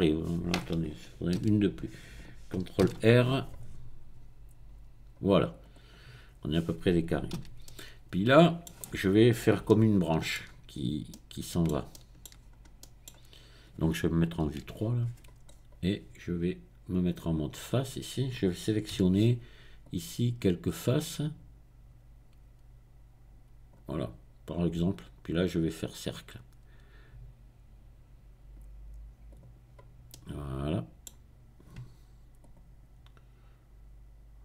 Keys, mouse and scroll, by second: 1.4 ctrl+z, 3.0 ctrl+r, 3.7-5.5 scroll up 2, 5.5 middle click, 7.4 a, 7.6-9.5 middle drag, 10.7-11.1 scroll up 2, 12.2 shift+middle click, 12.3-12.8 shift+scroll down 3, 12.8 middle click, 14.5 KP_3, 15.4-16.2 scroll up 2, 17.2 click, 17.7-19.8 middle drag, 19.0 c, 19.8-23.8 drag, 23.8 right click, 24.2-25.6 middle drag, 25.6 right click, 26.0-27.3 middle drag, 29.3 click, 30.1-32.4 middle drag, 32.4 click.